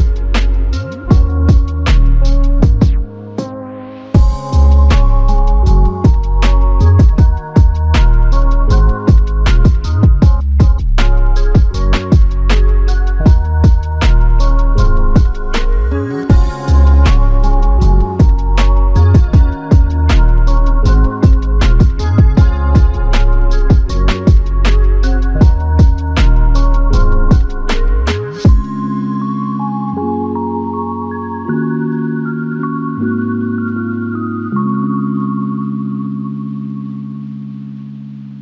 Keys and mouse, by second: 1.8 double click, 11.4 double click, 23.9 alt+click, 25.2 alt+click.